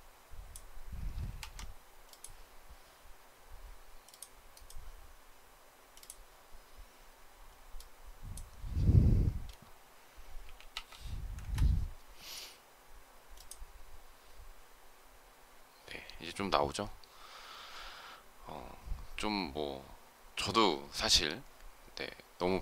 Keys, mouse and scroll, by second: 11.2 Return.